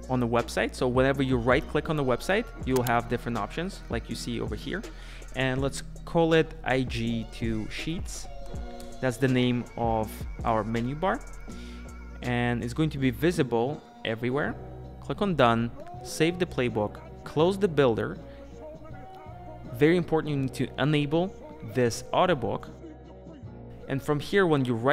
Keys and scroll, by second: 0.1 Return, 9.6 Return.